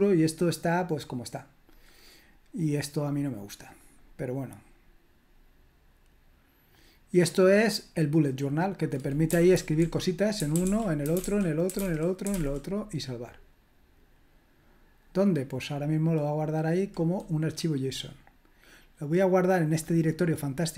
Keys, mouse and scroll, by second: 3.7 click, 6.7-8.0 drag, 8.6 click, 9.1-12.8 typing, 11.5 click, 13.7 click, 17.4-20.7 drag.